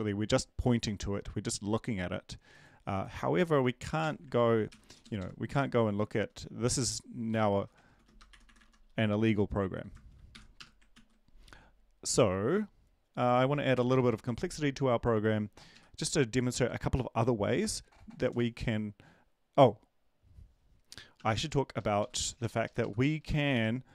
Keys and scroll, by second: 4.0 shift+Home, 4.7 ctrl+c, 4.8 Down, 5.0 Down, 5.2 Down, 5.5 Home, 5.8 ctrl+v, 8.3-9.1 typing, 10.3 shift+Home, 10.5 BackSpace, 10.9 ctrl+s, 13.7 Return, 13.9 Return, 21.3 BackSpace, 21.7 Left, 22.0 Up, 22.2 End, 22.4 Right, 22.6 Left, 22.8 Left, 23.1 Left, 23.4 ,, 23.4 ., 23.5 space.